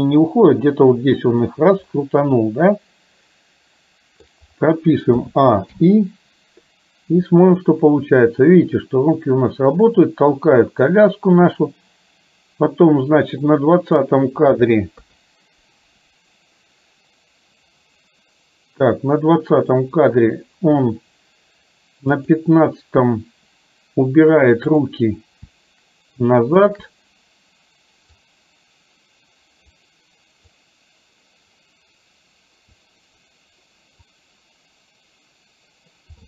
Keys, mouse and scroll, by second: 2.0-4.3 middle drag, 5.2 a, 5.8 i, 7.6-14.1 drag, 15.1 KP_3, 22.3 click, 24.7 click, 28.3-29.8 drag, 30.6-32.8 drag, 34.2-36.1 drag.